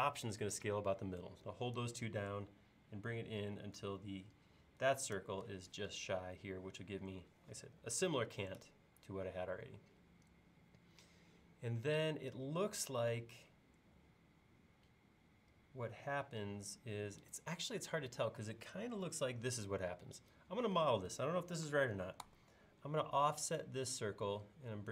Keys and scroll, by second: 20.9 space, 22.3 f.